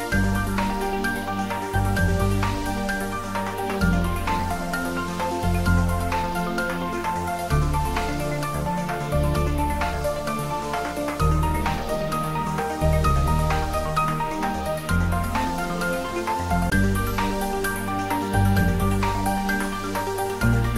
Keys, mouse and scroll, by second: 0.9-1.9 click, 2.0-3.2 click, 2.6 click, 3.9-6.1 drag, 6.5 scroll down 1, 9.2 g, 15.9 click, 17.2 a, 18.1 s, 20.1 click, 20.1-20.7 typing.